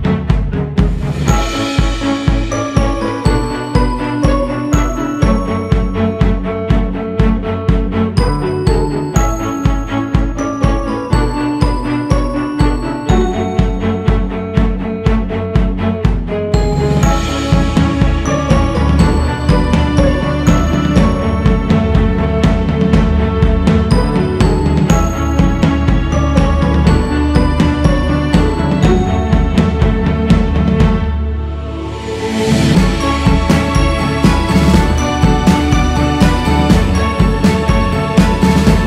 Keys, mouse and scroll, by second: 0.6 scroll up 1, 1.1-10.1 drag, 10.5-14.8 drag, 16.8-20.3 drag, 22.7-27.2 drag, 27.2 q, 27.9-29.2 drag, 29.2 shift+s, 29.8-32.2 drag, 32.2-32.7 scroll down 4, 33.1-33.5 scroll down 3, 33.5-33.9 scroll up 5, 35.9 click, 36.4-36.7 scroll up 3, 37.0-37.9 scroll up 3, 37.9-38.8 scroll up 4.